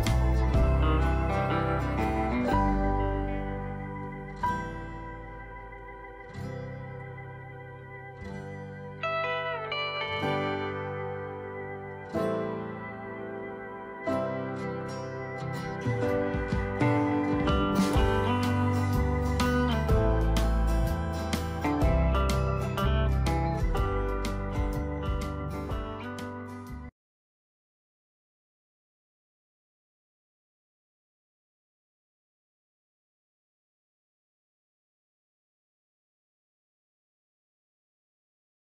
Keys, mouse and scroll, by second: 0.2-13.4 drag.